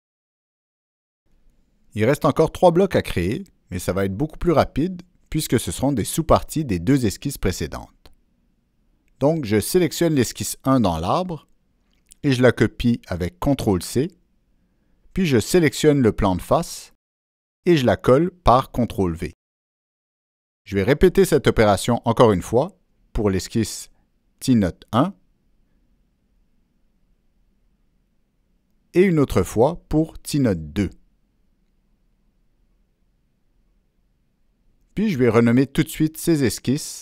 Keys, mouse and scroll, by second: 1.2 Return, 1.2 click, 1.3 Return, 1.7 Return, 2.5 middle click, 3.0-3.3 scroll up 1, 3.8 ctrl+middle click, 4.3 click, 5.0 click, 5.2 ctrl+middle click, 5.6 click, 5.8 ctrl+middle click, 6.3 click, 7.4 click, 8.3 click, 9.4 click, 13.9 ctrl+c, 15.5 click, 15.7 ctrl+c, 18.0 ctrl+v, 18.0 ctrl+c, 18.0 click, 19.9 click, 20.0 ctrl+v, 21.6 ctrl+v, 21.6 click, 24.1 click, 24.9 click, 25.7 ctrl+v, 25.7 click, 27.2 click, 27.2 ctrl+v, 29.4 click, 29.5 ctrl+v, 30.8 ctrl+c, 31.7 ctrl+c, 31.8 click, 32.0 ctrl+c, 33.1 ctrl+v, 34.5 click, 36.3 click, 36.6 ctrl+v.